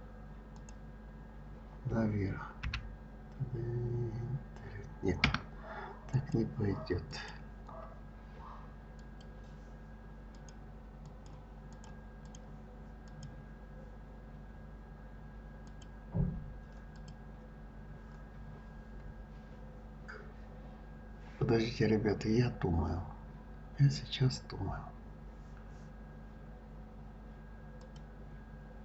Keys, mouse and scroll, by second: 0.5 click, 2.6 g, 6.1 click, 7.1 click, 9.0 click, 10.3 click, 11.0 click, 11.7 click, 12.2 click, 13.1-13.5 drag, 15.7 click, 16.9 click, 18.5-20.6 scroll up 3, 20.6 scroll down 2, 21.4-22.0 scroll down 2, 27.8 click.